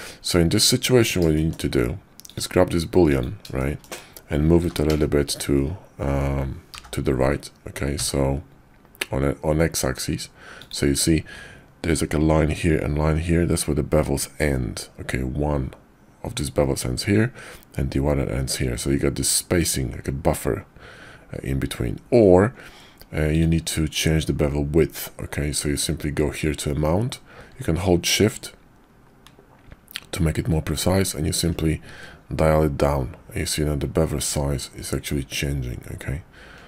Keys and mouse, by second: 0.4 Tab, 1.3 shift+drag, 3.1 click, 3.6 shift+drag, 4.5 g, 28.0-36.6 shift+drag.